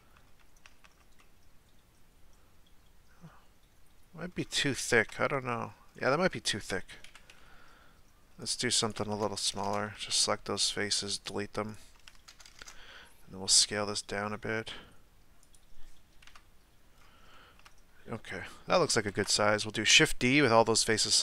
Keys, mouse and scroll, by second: 0.0-0.6 middle drag, 0.6 a, 0.8 a, 1.2-4.3 middle drag, 4.3-4.7 scroll down 1, 4.7-5.8 shift+middle drag, 5.8-6.4 scroll up 5, 6.4-7.1 shift+middle drag, 7.1 KP_1, 8.4 right click, 9.2 ctrl+KP_Add, 9.6 ctrl+KP_Add, 9.9 x, 11.7 right click, 12.3 ctrl+KP_Add, 12.5 ctrl+KP_Add, 13.5 s, 16.3 KP_Decimal, 17.0-17.3 scroll down 2, 17.3-19.1 shift+middle drag, 19.1 shift+d.